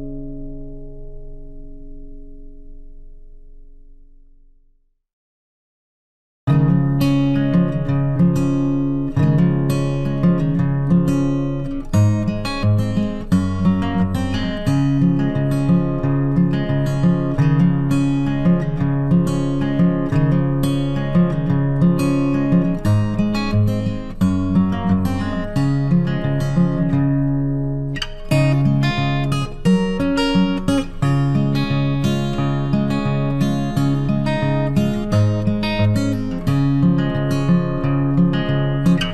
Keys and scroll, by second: 1.6 Delete, 4.3 ctrl+d, 17.0 ctrl+t.